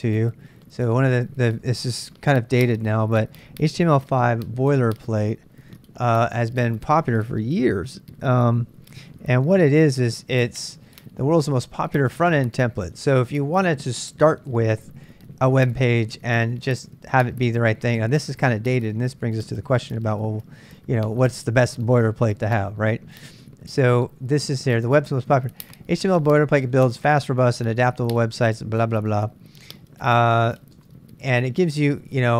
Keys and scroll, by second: 0.0-1.5 typing, 4.0-6.9 typing, 9.4-10.3 typing.